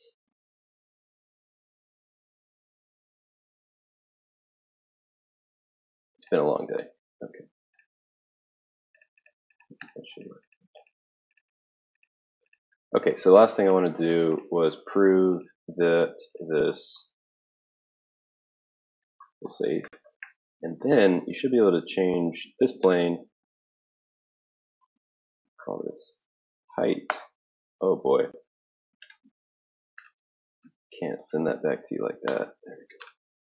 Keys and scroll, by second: 25.9-27.4 typing, 28.5 typing, 30.1-32.9 typing.